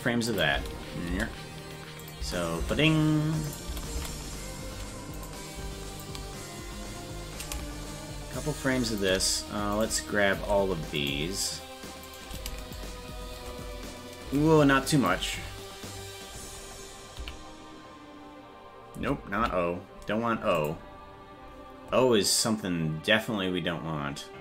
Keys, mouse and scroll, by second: 0.3 click, 0.5 space, 2.0 space, 2.0 click, 3.5 click, 3.7 space, 5.2 right click, 6.0-9.0 shift+drag, 9.8 right click, 11.1-12.7 shift+right drag, 12.7-15.1 shift+drag, 17.2 o.